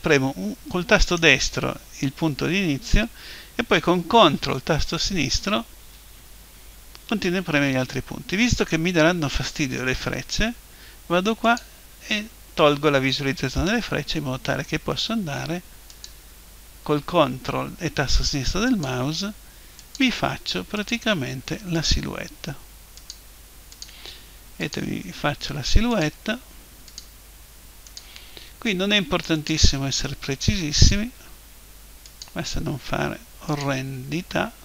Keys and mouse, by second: 1.0-3.1 right drag, 11.4 click, 15.9 click, 18.7-34.6 drag.